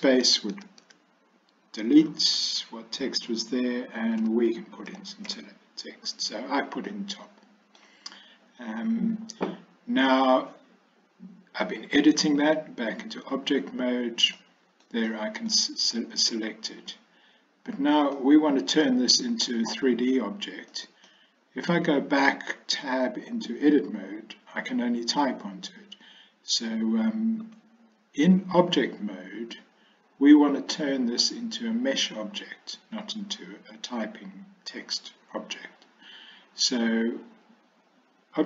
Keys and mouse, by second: 0.3 BackSpace, 0.6 BackSpace, 0.9 BackSpace, 4.3 shift+t, 5.0 o, 5.3 p, 6.9-7.9 middle drag, 12.5 click, 14.4-14.9 middle drag, 15.1-15.6 middle drag, 18.2-19.3 middle drag, 20.8 middle click, 23.3 Tab, 27.5 Tab.